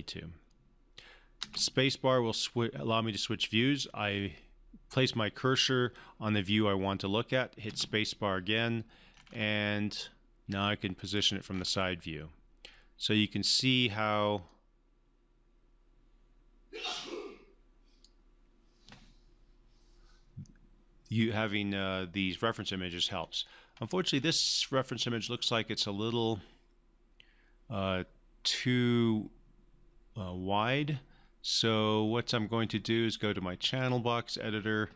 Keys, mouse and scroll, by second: 1.4 space, 7.7 space, 9.1-10.4 scroll up 1, 10.5-11.1 alt+middle click, 11.5 scroll up 1, 14.4-18.2 drag, 23.2 scroll down 1, 23.7-24.9 scroll up 1, 33.8 click.